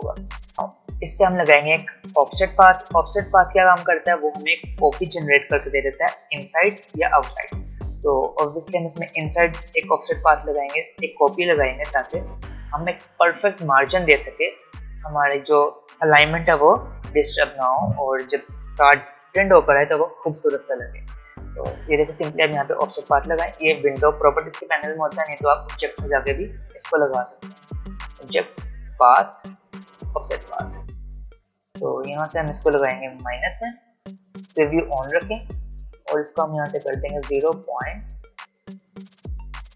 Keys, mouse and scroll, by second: 22.7 click, 26.3 click, 32.1 click, 36.7 click, 37.6-39.7 drag.